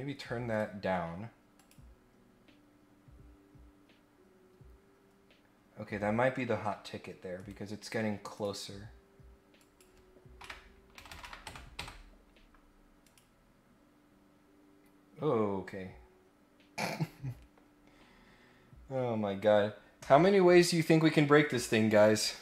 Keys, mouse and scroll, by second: 0.5 click, 1.5 click, 6.4 scroll up 2, 7.3 right click, 8.3 click, 9.5 click, 13.0 click, 19.0-20.4 scroll up 2.